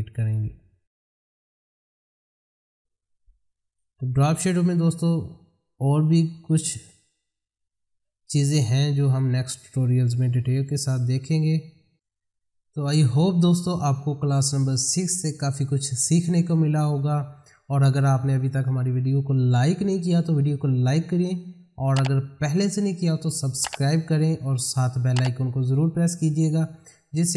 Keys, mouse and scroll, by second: 2.2 middle click, 8.3 click, 10.7-11.9 scroll down 1.